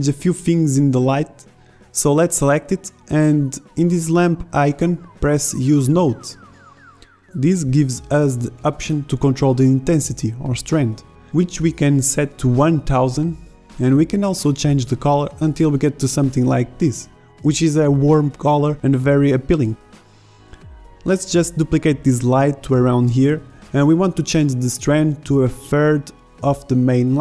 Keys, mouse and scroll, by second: 8.2 KP_0, 12.2 BackSpace, 17.4 shift+z, 19.8 shift+z, 20.6 KP_7, 20.9 KP_5, 22.3 KP_7, 22.8 shift+d, 24.7 KP_5.